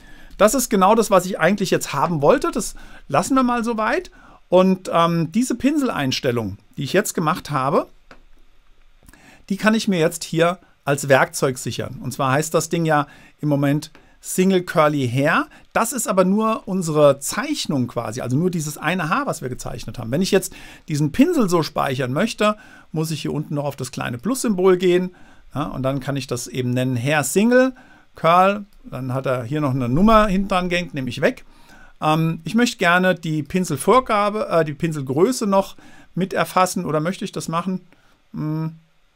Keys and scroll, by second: 0.3 super+a, 0.7 BackSpace, 30.0 BackSpace.